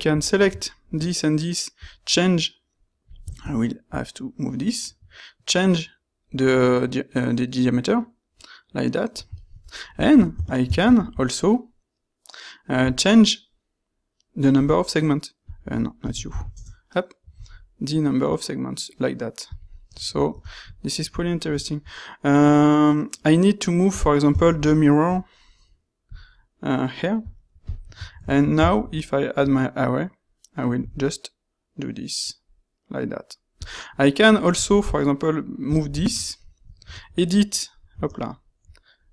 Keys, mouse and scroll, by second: 10.8 ctrl+shift+q, 20.8-22.2 ctrl+shift+middle drag, 24.4 ctrl+shift+q, 28.6 ctrl+shift+q.